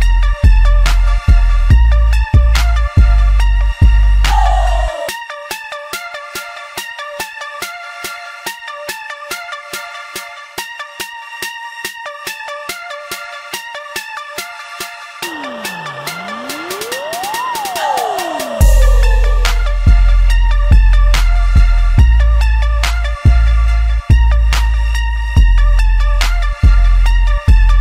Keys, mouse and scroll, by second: 2.0 ctrl+middle click, 2.8 Tab, 4.1 shift+d, 9.4 z, 10.2-11.9 middle drag, 11.9 shift+click, 12.5 g, 14.7-16.8 shift+middle drag, 16.8 ctrl+j, 17.9 ctrl+a, 19.0 shift+middle click, 19.4 click, 19.9 click, 20.4 shift+click, 21.1 shift+click, 21.8 shift+click, 22.5 shift+click, 23.6 ctrl+a, 25.3 ctrl+j, 26.0 ctrl+a, 27.0 shift+middle click, 27.7 click.